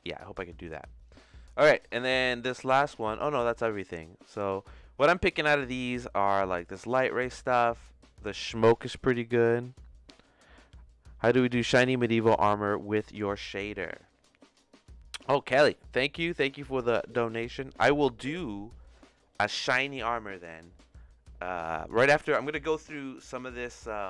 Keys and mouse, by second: 23.5 click.